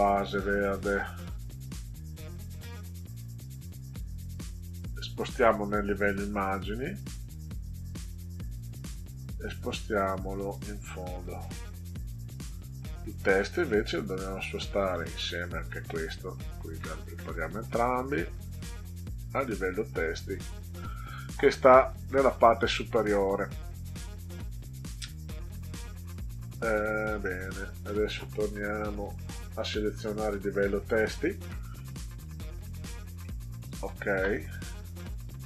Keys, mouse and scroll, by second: 1.9 right click, 5.9 click, 8.3 right click, 11.1 click, 12.6 click, 13.5 right click, 15.0 click, 16.1 shift+click, 16.9 right click, 20.1 click, 20.7 click, 21.8 ctrl+scroll up 2, 23.4 click, 27.0 click, 29.1 click, 30.8 click, 32.1 click, 33.2 middle click.